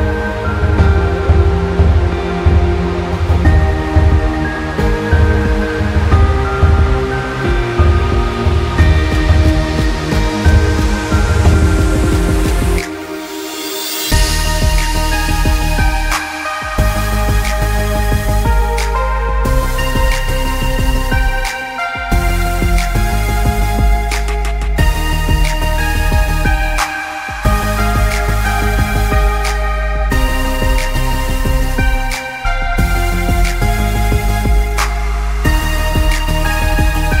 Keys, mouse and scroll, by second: 1.1 click, 2.4 z, 2.6 alt+scroll down 1, 2.9 alt+scroll up 1, 3.0 alt+scroll down 1, 3.2 alt+scroll up 1, 3.3 scroll down 1, 3.5 click, 4.4 scroll down 1, 4.5 space, 4.7 scroll up 1, 4.8 click, 5.6 ctrl+z, 5.8 click, 6.7 click, 7.7 alt+scroll down 2, 8.0 space, 8.2 space, 8.4 scroll up 1, 8.6 click, 9.9 click, 10.3 scroll, 10.6 alt+scroll up 1, 10.8 click, 11.3 space, 11.5 scroll up 1, 11.6 click, 12.1 space, 12.4 alt+scroll up 1, 12.6 click, 13.0 scroll up 1, 13.1 click, 13.6 space, 13.8 click, 14.5 click, 15.0 z, 15.2 scroll down 1, 15.3 space, 15.6 scroll up 1, 15.7 click, 18.2 alt+scroll down 1, 18.4 scroll up 1, 18.5 click, 19.3 alt+scroll up 1, 19.7-21.2 drag, 21.2-21.6 alt+scroll down 3, 21.4 space, 22.1 space, 22.8 space, 22.9 alt+scroll up 2, 23.2 click, 23.9 Escape, 24.0 click, 24.4 Escape, 24.5 click, 24.9 Escape, 25.0 click, 25.3 Escape, 25.4 click, 25.7 Escape, 26.0 click, 26.2 Escape, 26.3 click, 26.7 space, 26.8 Escape, 26.9 click, 27.4 Escape, 27.5 space, 27.7 alt+scroll down 1, 27.9 scroll up 1, 28.1 click, 28.7 Escape, 28.9 click, 29.0 z, 29.1 click, 29.4 space, 29.6 click, 30.2 Escape, 30.6 click, 30.9 Escape, 31.0 alt+scroll down 1, 31.1 click, 31.2 space, 31.4 click, 31.6 click, 32.1 shift+click, 33.6 click, 34.0 alt+scroll down 1, 34.4 space, 34.5 click, 35.2 click, 35.4 alt+scroll up 2, 35.8 click, 36.3 click.